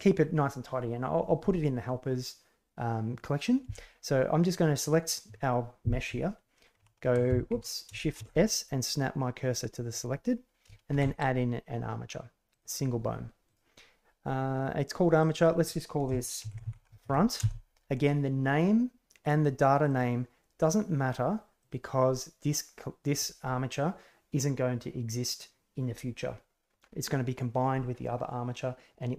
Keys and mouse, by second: 4.7 right click, 6.7 shift+a, 8.1 shift+s, 10.9 shift+a, 13.4 click, 15.3-19.2 drag, 21.5 click.